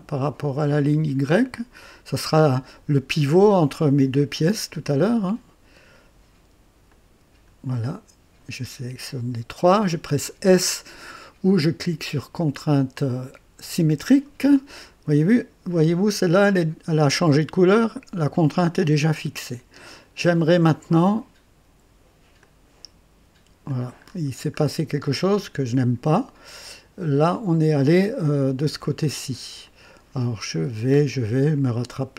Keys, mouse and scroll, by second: 1.3 click, 6.8 click, 13.6 s, 19.6 scroll down 2, 20.2-20.8 right drag, 22.4-23.8 drag, 24.0-24.8 scroll up 4, 25.0-25.6 right drag, 26.6-27.5 drag, 29.6 click, 30.6-31.0 scroll up 1, 31.5 click.